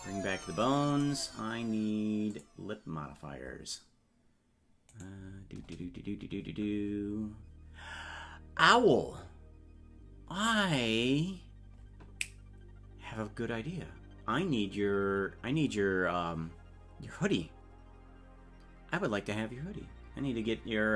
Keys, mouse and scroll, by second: 0.9-2.3 right drag, 2.3 click, 5.1 right click.